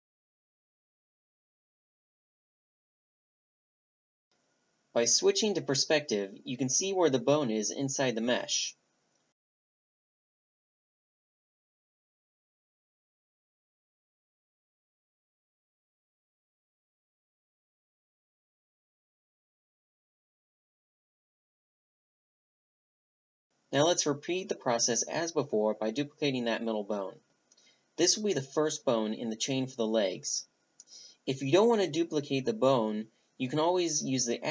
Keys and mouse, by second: 3.9-7.5 middle drag, 7.9 click, 10.1-11.9 middle drag, 12.0-14.8 drag, 15.8-17.7 middle drag, 17.6-19.3 drag, 21.1-22.7 drag, 24.5-28.4 drag, 28.4 shift+d, 31.0 alt+p, 32.6 alt+p.